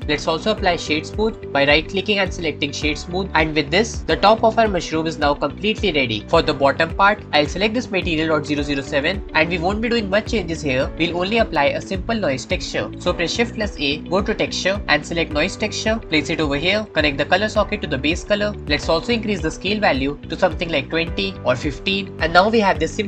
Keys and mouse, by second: 2.1-3.3 drag, 3.6-6.2 drag, 3.6-6.2 middle drag, 3.6-6.2 right drag, 6.3-7.2 drag, 6.3-7.2 middle drag, 6.3-7.2 right drag, 8.7-12.8 drag, 13.7 shift+a, 17.3-18.5 drag, 20.3-22.1 drag.